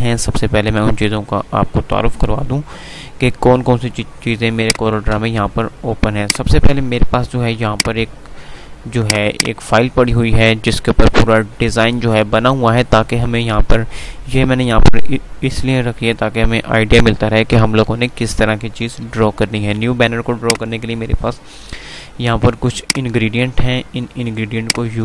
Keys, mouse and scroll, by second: 4.8 click, 5.0 F3, 6.3 F2, 6.4 click, 6.6 F2, 7.5 F2, 9.1 click, 19.4 F3, 20.0 F2, 20.6 click, 21.1 F2, 23.0 click.